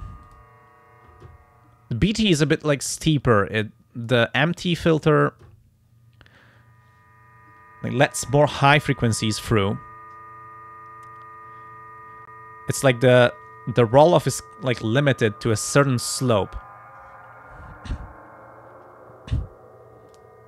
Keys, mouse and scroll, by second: 0.3 click, 3.0-4.3 drag, 4.6 click, 5.2 click, 19.3 click, 20.1 click.